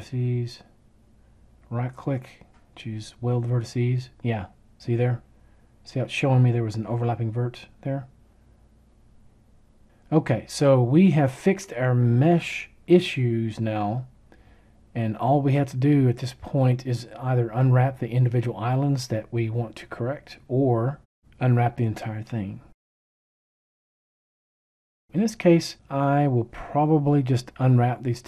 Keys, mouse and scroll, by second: 1.6-3.4 right drag.